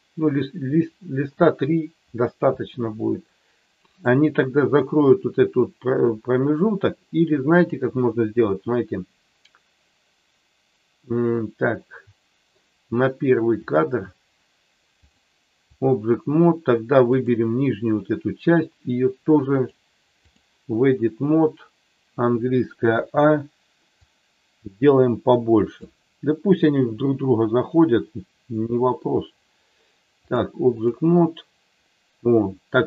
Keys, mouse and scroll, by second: 3.9 click, 7.5-12.5 drag, 13.5 click, 15.0 click, 17.1 click, 19.5 click, 22.9 a, 24.0-25.7 drag, 30.2 click.